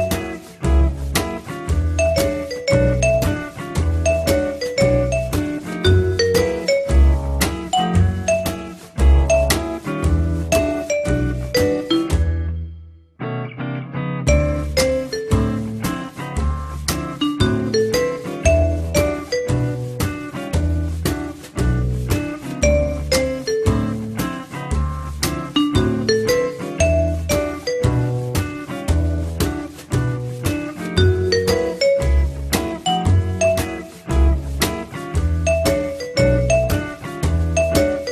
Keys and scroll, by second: 27.6 F4, 29.7 ctrl+s.